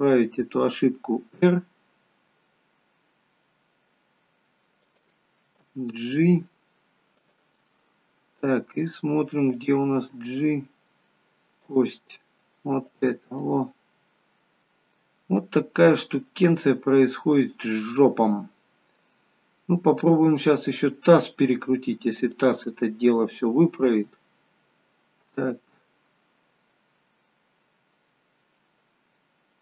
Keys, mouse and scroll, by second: 1.1 r, 5.6 g, 7.6 middle click, 9.4 click, 9.9 g, 12.7 click, 13.2 middle click, 15.0-15.4 scroll up 4, 15.4 middle click, 19.1-20.6 scroll down 2, 20.6 click, 21.0 middle click, 22.3 click, 23.9 r.